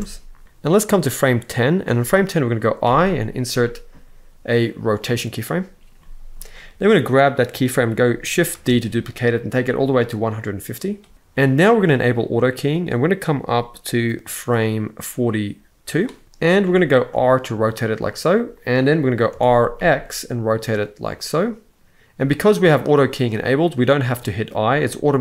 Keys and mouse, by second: 0.7-1.5 drag, 2.6 i, 5.7 middle click, 6.4 click, 8.2 shift+d, 13.6-15.7 drag, 16.4 click, 16.8 r, 18.0 click, 19.0 r, 19.5 x, 21.6 click, 21.8 i.